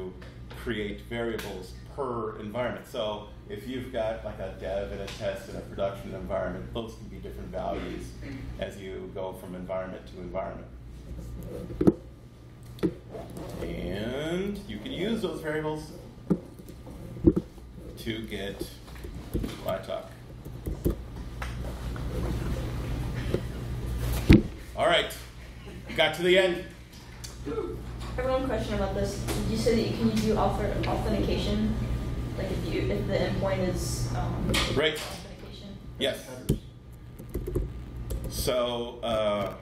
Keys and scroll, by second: 19.0 super+f, 19.1-21.3 typing, 36.5 Return, 36.9-38.5 typing.